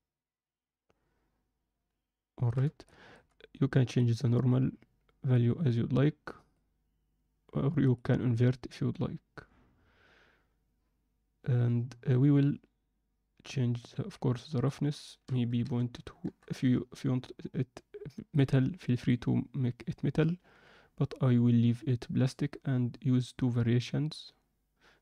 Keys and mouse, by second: 2.9 alt+shift+middle click, 4.0-6.6 drag, 14.6-16.2 drag, 18.3 click.